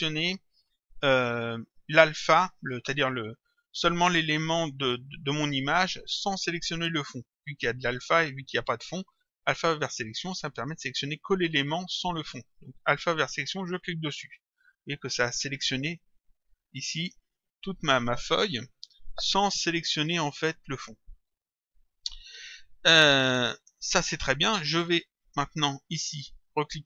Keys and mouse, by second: 14.1 click, 16.6 click, 25.3 click.